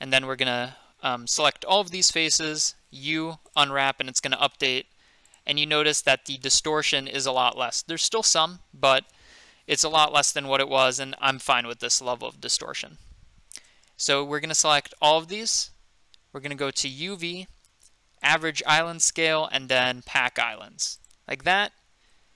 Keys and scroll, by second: 2.8-3.6 typing, 15.4 a.